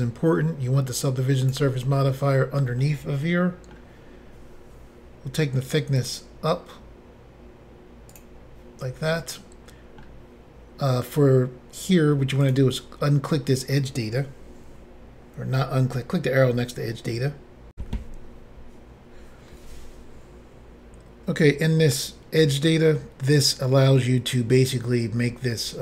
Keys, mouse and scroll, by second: 1.4 click, 1.5 click, 2.8 middle click, 6.0 click, 6.1 click, 8.2 click, 9.1 middle click, 12.4 click, 12.5 click, 17.7 Insert.